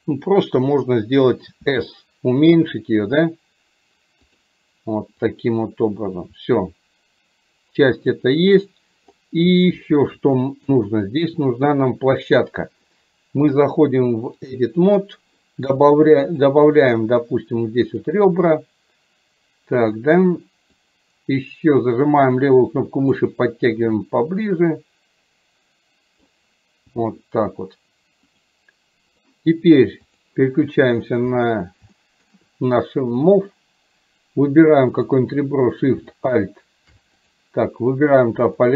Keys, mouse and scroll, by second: 5.5-8.2 drag, 10.5-10.8 shift+middle drag, 13.7-14.7 drag, 18.0 click, 21.0-23.2 drag, 24.2-26.3 drag, 28.6 click, 30.2 click, 32.1 shift+middle click, 36.2 alt+shift+click, 38.5 click.